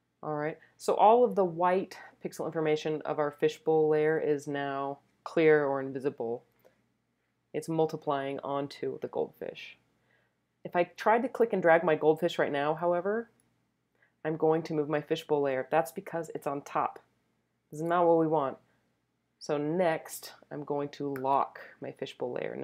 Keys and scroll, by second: 17.8 z.